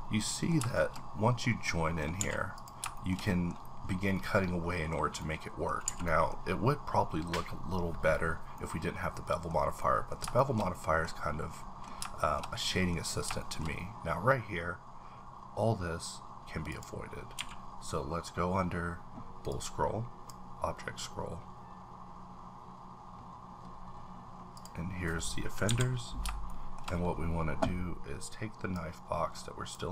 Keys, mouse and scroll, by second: 0.2 middle click, 0.7 shift+middle click, 1.2-1.7 scroll down 2, 1.7 middle click, 2.2 a, 2.2-2.6 scroll down 1, 2.6 click, 2.9 shift+middle click, 4.2 scroll down 2, 5.2 middle click, 5.9 a, 8.5-10.2 middle drag, 10.2 shift+scroll up 1, 10.4 shift+middle click, 11.1-11.5 scroll up 2, 11.5 middle click, 12.2 shift+middle click, 13.0 scroll up 2, 13.4 shift+middle click, 16.4-16.7 scroll down 1, 16.7 click, 17.3 q, 19.5-21.0 drag, 20.8-22.0 scroll up 5, 22.4 scroll down 1, 23.1-24.1 scroll up 3, 24.1-24.5 scroll down 1, 24.5 click, 26.2 click, 26.5 shift+middle click, 26.9-28.7 scroll up 2, 29.0-29.9 drag.